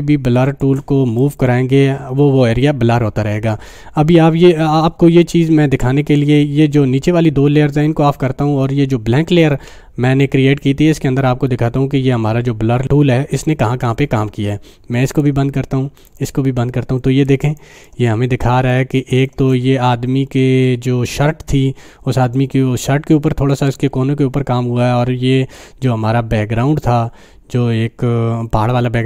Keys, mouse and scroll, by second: 0.2 space, 1.2-6.2 drag, 15.1 click, 17.2 space, 17.6 click, 17.7 space, 21.4 typing.